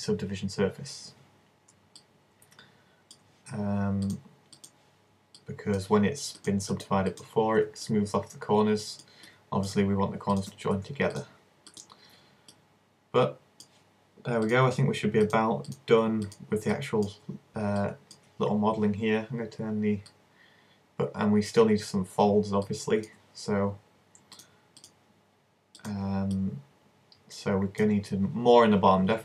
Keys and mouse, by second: 2.0-3.1 middle drag, 4.8 click, 5.4 middle click, 12.5-13.7 middle drag, 13.7 click, 14.5-15.7 drag, 16.3 click, 16.7 middle click, 20.2-21.9 drag, 21.9 middle click, 24.4 click, 26.0 click, 26.5-27.5 middle drag.